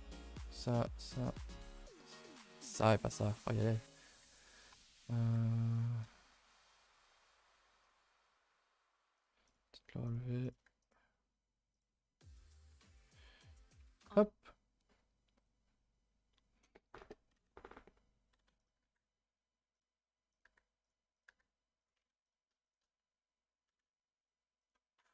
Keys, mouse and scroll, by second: 0.7 click, 1.7 click, 2.5 click, 2.8 click, 7.0 click, 8.2 click, 9.5 click, 10.4 click, 11.7 click, 12.5 click, 18.6 click, 20.3 click, 21.1 click, 22.2 click, 22.6 click.